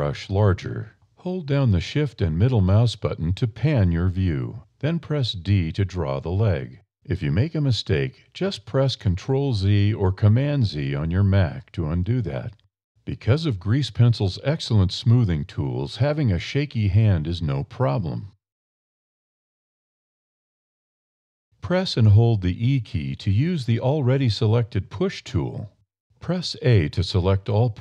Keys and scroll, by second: 1.7 a, 4.6 d, 11.7 super+z, 12.2 super+d, 12.8 d, 24.0 e.